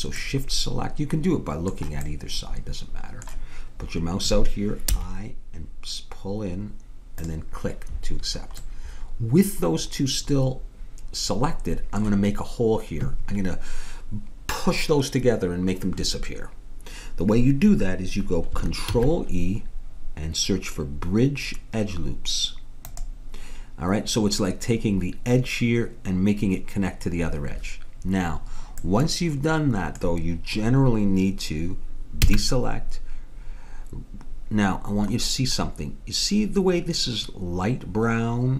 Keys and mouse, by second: 0.9 right click, 1.1 middle click, 4.9 i, 8.7-10.0 middle drag, 19.0 ctrl+e, 25.1-30.4 middle drag, 32.3 a.